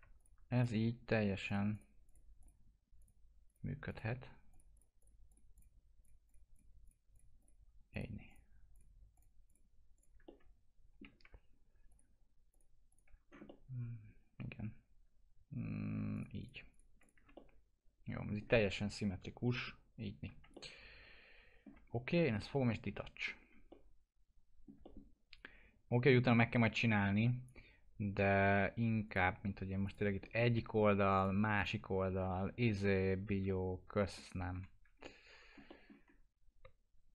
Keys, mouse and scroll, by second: 10.3-11.9 middle drag, 11.9 ctrl+click, 13.2 scroll down 1, 13.5-16.1 alt+middle drag, 16.1 ctrl+click, 17.3-20.5 alt+middle drag, 20.5 alt+middle click, 21.9 scroll up 1, 22.1 alt+middle click, 23.7 alt+middle click, 26.6-29.0 drag, 30.2 middle click, 31.1 click, 32.0 alt+q, 32.8 F4, 33.5 alt+middle click, 34.5 F4, 35.0 alt+middle click, 36.1 scroll up 1.